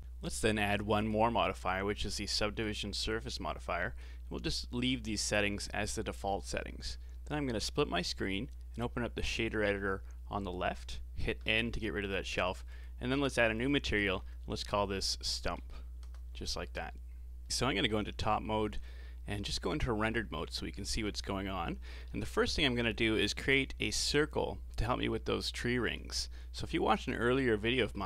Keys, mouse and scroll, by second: 1.0-3.6 drag, 3.6-4.1 scroll down 4, 7.8-11.4 drag, 11.4 n, 12.7-16.7 drag, 17.4 KP_7, 18.1-18.8 scroll up 4, 18.8 z, 20.1-20.9 middle drag, 20.9 shift+a, 26.3 middle click, 26.9 click, 27.7 middle click.